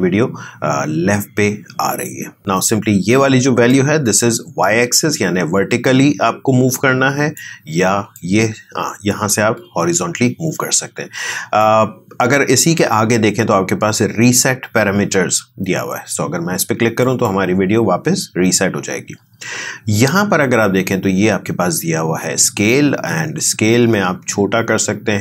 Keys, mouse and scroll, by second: 2.4 ctrl+z, 3.7-12.1 drag, 17.5 click, 23.6-25.2 drag.